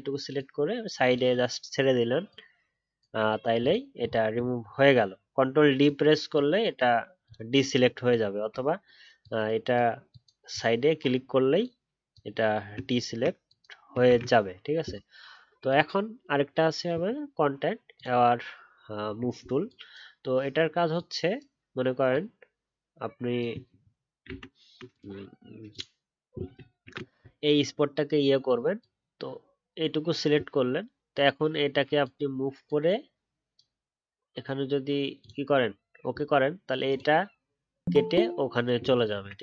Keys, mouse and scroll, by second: 3.9-4.3 alt+scroll down 1, 4.6-8.4 alt+scroll up 1, 8.6-13.7 alt+scroll up 1, 14.0 ctrl+d.